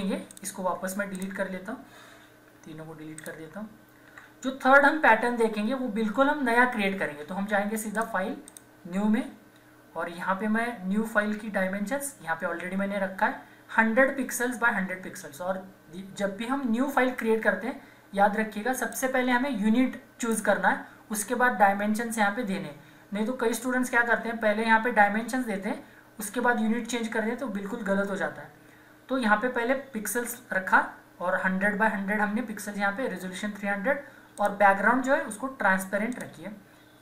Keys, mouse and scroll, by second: 0.3 click, 3.2 ctrl+click, 4.1 Delete, 7.9 click, 8.0 click, 18.7 click, 34.4 click.